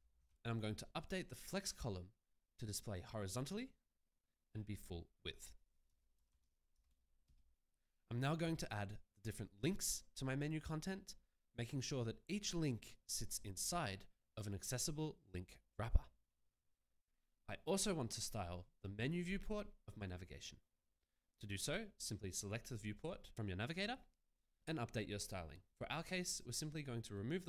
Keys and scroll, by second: 0.0-0.7 typing, 6.1 0, 7.1 %, 7.2 Return.